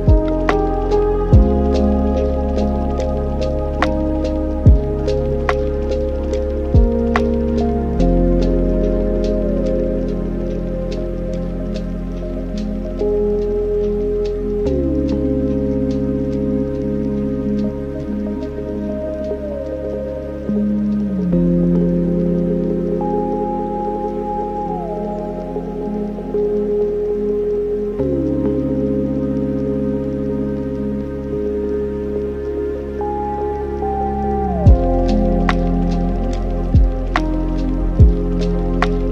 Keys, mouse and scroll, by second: 0.3 x, 1.8 drag, 5.0 click, 6.4 click, 7.9 click, 8.9 shift+a, 11.5 click, 12.2 click, 13.9 click, 14.3 click, 15.3 click, 16.6-17.4 middle drag, 17.4 click, 18.8 middle click, 19.6 click, 20.0 middle click, 20.6 click, 21.7 click, 22.1 click, 23.3 scroll down 2, 23.5 middle click, 24.3 click, 25.5 shift+a, 29.2 middle click, 29.9 click, 30.9-32.3 shift+right drag, 32.3 shift+a, 36.4 alt+right click, 37.5-38.7 middle drag, 38.7 drag.